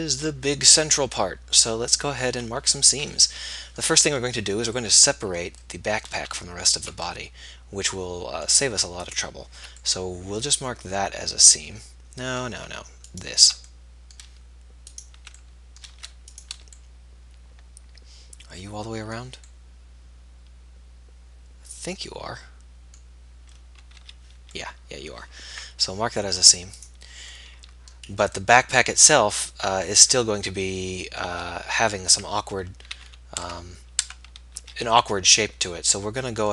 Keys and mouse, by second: 9.3-11.2 middle drag, 12.0-14.2 middle drag, 14.2-15.9 drag, 15.9 middle click, 16.5 ctrl+z, 21.6 middle click, 24.0-25.0 middle drag, 24.2 z, 27.9-28.9 middle drag, 31.0-33.2 middle drag, 33.2 a, 33.8 Tab, 34.3 Tab, 34.9 z.